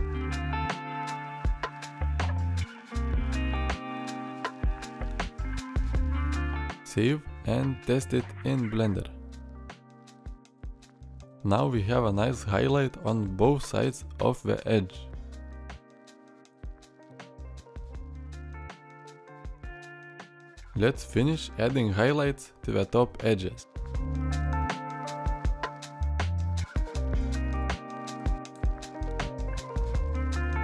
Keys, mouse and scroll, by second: 10.7 alt+r, 16.4 middle drag, 17.0 shift+middle drag, 19.1 middle drag, 19.8 shift+middle drag, 20.5 middle click.